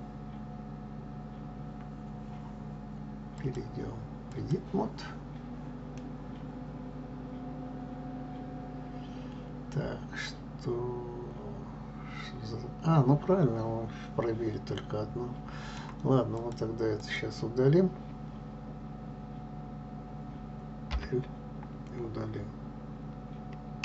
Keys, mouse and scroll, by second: 0.0-0.4 scroll up 3, 1.4-1.7 scroll down 2, 4.4-6.1 drag, 6.1-16.4 middle drag, 16.4-21.0 drag, 21.0 l.